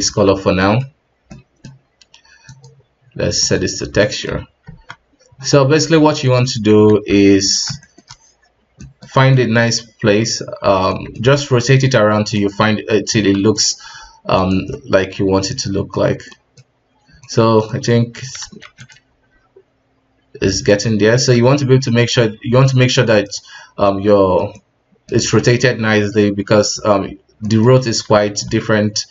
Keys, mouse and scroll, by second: 0.0 ctrl+space, 0.6-2.4 middle drag, 3.8 drag, 4.0-4.3 middle drag, 4.3 scroll up 2, 4.6 Tab, 5.8 s, 6.9 alt+`, 7.3-11.3 middle drag, 11.3 g, 12.7 s, 13.8 g, 14.7-16.1 middle drag, 16.1-17.2 scroll up 2, 16.3 middle click, 17.2-18.4 middle drag, 18.4 s, 19.1 g, 21.3 r, 24.5-28.2 middle drag, 28.2 r.